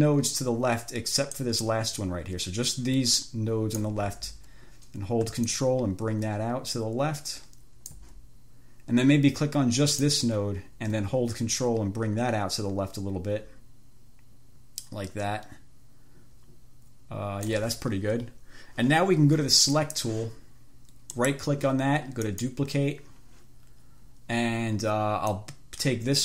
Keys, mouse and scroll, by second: 1.6 middle click, 5.7-8.4 ctrl+drag, 10.2 click, 11.9-17.9 ctrl+drag, 20.0 click, 21.3 right click, 22.5 click, 25.5-26.2 scroll up 1.